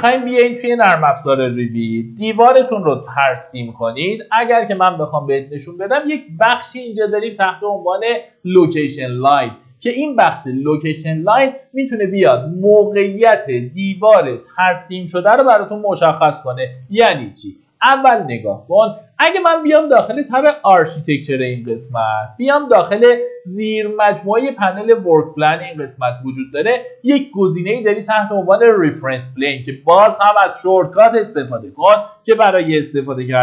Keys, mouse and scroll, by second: 1.3 Tab, 2.2 click, 2.9 middle click, 3.1-4.1 typing, 5.6-6.4 typing, 10.5 click, 15.7 Escape, 17.2 middle click, 19.8 click, 29.6 middle click, 31.0 Escape, 33.3-33.4 typing.